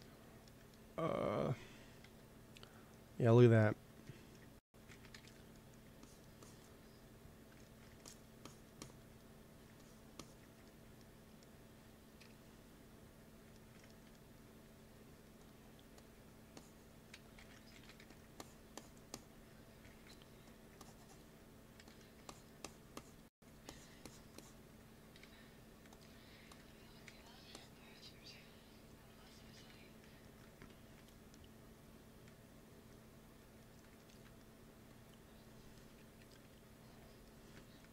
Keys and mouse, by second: 1.0 ctrl+s, 4.8 shift+c, 5.0 f, 5.1-12.1 drag, 12.1 KP_1, 14.6 t, 15.5 click, 16.0 t, 17.0 ctrl+z, 17.3 ctrl+z, 17.6 shift+c, 17.9 f, 18.3-19.6 drag, 19.8 shift+c, 20.2 f, 21.7 f, 25.1 t, 26.6 t, 26.9 f, 27.8 f, 29.2 g, 29.4 f, 32.6-34.3 drag, 34.3 middle click, 34.8-36.4 drag, 35.9 KP_1, 36.3 KP_3, 37.7 f.